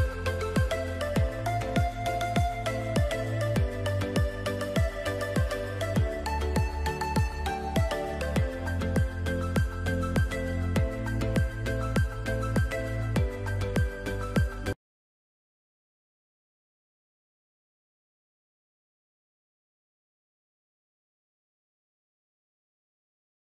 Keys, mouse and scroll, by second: 6.2-10.8 typing, 10.9 Return.